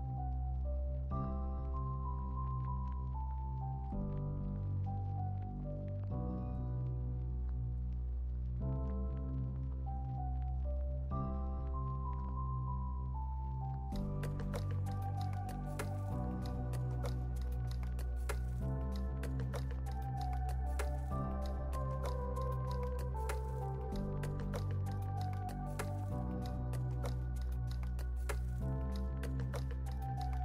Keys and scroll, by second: 0.4 x, 0.7 space, 6.6 space, 12.6 space, 19.7 super+-, 23.1 super+c, 23.3 super+v, 24.1 super+c, 24.3 super+v, 24.7 x, 27.5 super+c, 29.4 super+c, 29.7 super+v.